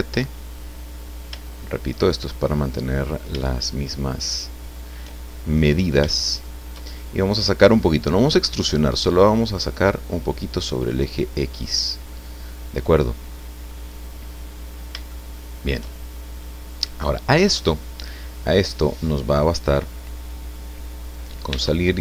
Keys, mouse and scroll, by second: 0.9-1.4 scroll down 2, 1.4 shift+middle click, 2.5 middle click, 4.2 shift+right click, 5.3 shift+middle click, 6.2 shift+middle click, 7.7-11.8 drag, 12.1 middle click, 13.3 scroll down 2, 13.7 click, 14.5-15.0 scroll up 3, 15.1 shift+click, 16.0 shift+scroll down 2, 16.4 click, 18.3-19.9 drag, 21.5 Tab.